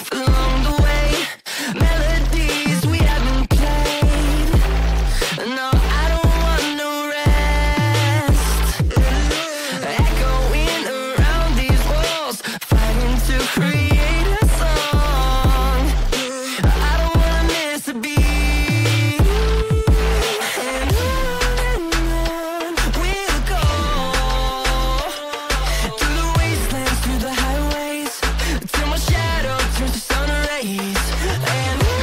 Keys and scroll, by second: 1.9 ctrl+g, 2.5 c, 2.9 shift+F2, 3.4 Escape, 11.8 space, 12.0 Escape, 19.9 c, 20.6 F4, 21.8 c, 24.4 F2.